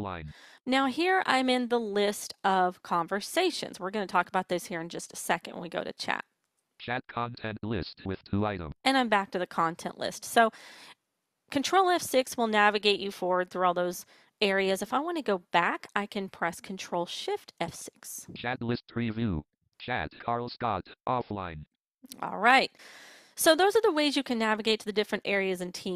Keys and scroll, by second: 16.1 ctrl+shift+F6.